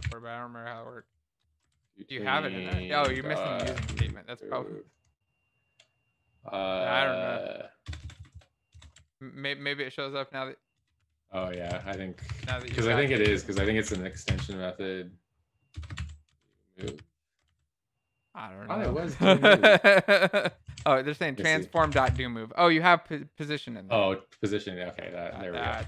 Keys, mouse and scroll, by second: 10.5 Down, 13.1 ctrl+s, 13.1 Down, 13.1 End.